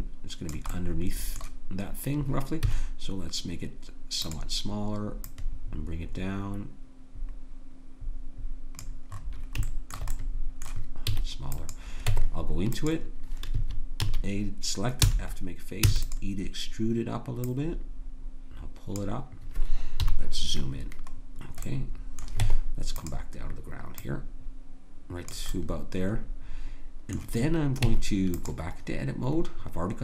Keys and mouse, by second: 0.8-1.8 middle drag, 2.6 s, 5.3 click, 11.2 s, 12.0 Tab, 13.5 a, 14.0 a, 15.0 f, 15.8 e, 17.5-19.4 drag, 20.0 KP_Decimal, 22.4 Tab, 27.8 Tab.